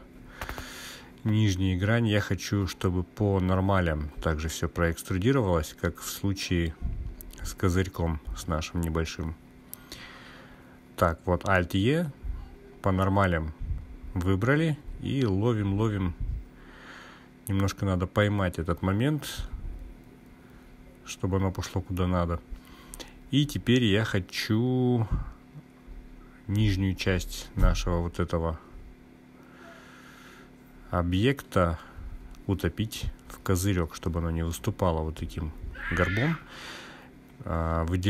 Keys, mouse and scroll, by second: 3.9 click, 4.8 ctrl+z, 10.9 alt+e, 25.5 click, 27.9 click, 29.7-31.3 drag, 35.7 click.